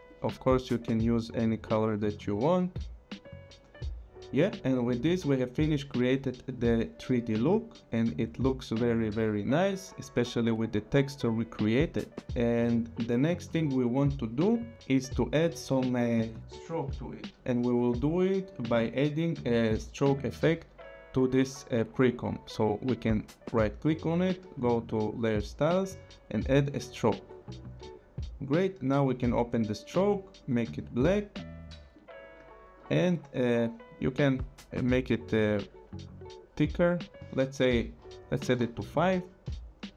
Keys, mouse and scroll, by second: 0.3 click, 4.9 click, 7.7 click, 8.4 click, 12.3 click, 21.7 click, 23.2 right click, 26.6 click, 28.4 click, 29.7 click, 31.9 click, 34.0 click, 37.9 5, 38.5 Return.